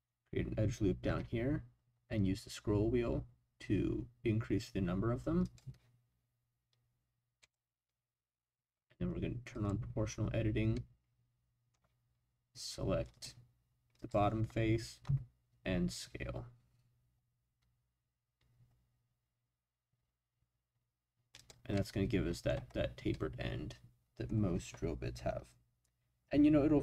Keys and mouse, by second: 1.0 ctrl+r, 7.4 click, 9.5 click, 10.7-11.7 middle drag, 13.1 click, 14.0 click, 15.0 s, 21.4 click, 21.7 middle click, 23.1-24.2 middle drag.